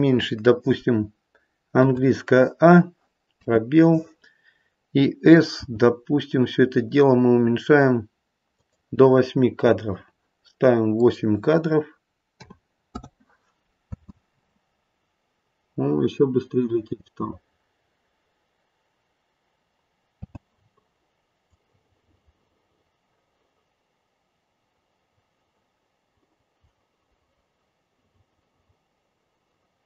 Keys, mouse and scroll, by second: 1.8 a, 3.4 space, 5.6 s, 10.9 click, 13.8 space, 16.0-16.8 scroll up 1, 16.8-19.3 scroll up 2, 20.1 space, 21.5 click.